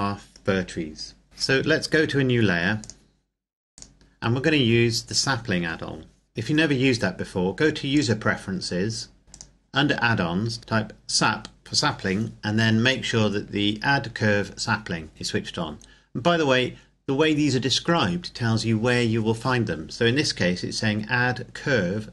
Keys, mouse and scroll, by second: 1.2 Escape, 2.7 click, 6.3 click, 8.1 click, 9.3 click.